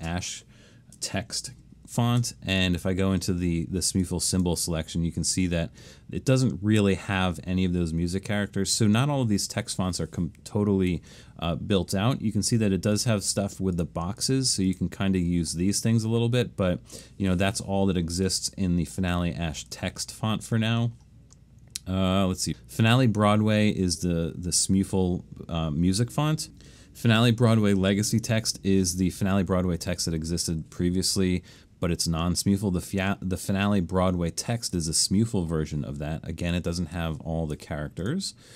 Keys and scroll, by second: 0.0 space, 2.2 alt+shift+super+s.